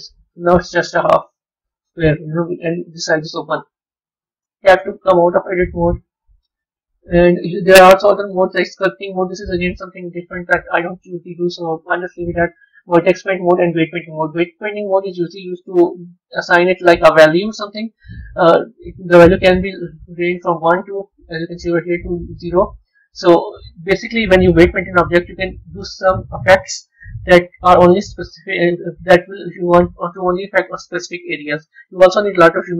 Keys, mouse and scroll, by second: 0.0 middle click, 2.4 middle click, 4.3 Tab, 5.2 z, 7.6-10.7 drag, 15.7-18.8 middle drag, 20.2-23.2 drag.